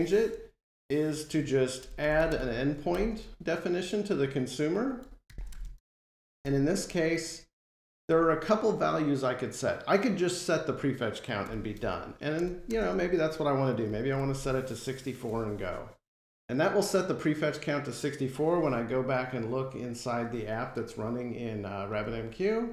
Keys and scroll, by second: 11.3 Return, 13.7 Return, 15.5 F5.